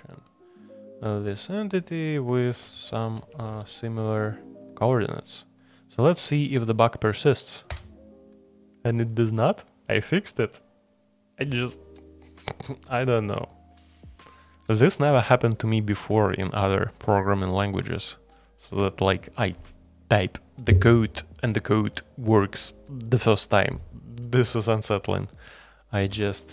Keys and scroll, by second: 3.2 Escape, 3.5 shift+a, 26.1 k.